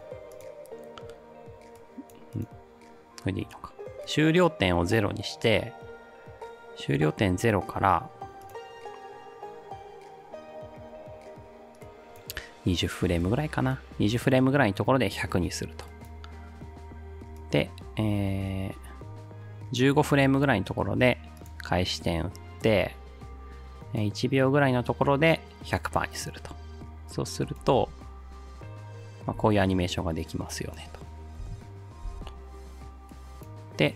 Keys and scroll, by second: 27.7 space, 29.4 space, 31.4 space, 32.1 space.